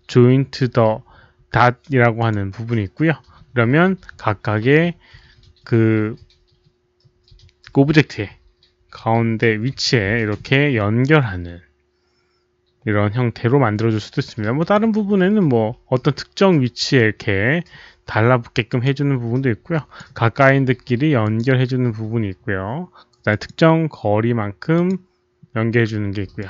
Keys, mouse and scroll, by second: 2.1 click, 5.2 click, 7.8 click, 10.6 click, 14.5 click, 15.9 click, 16.9 click, 18.6 click, 19.7 click, 21.2 click, 23.2 click, 24.7 click, 26.3 click.